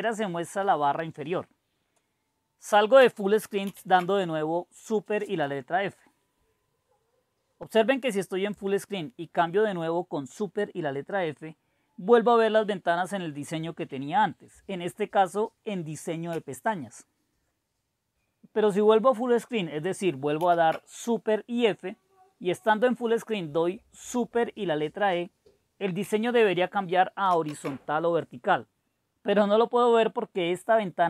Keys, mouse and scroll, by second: 1.1-2.7 scroll up 3, 3.6 super+f, 20.5 super+f, 23.4 super+f, 27.4 super+e.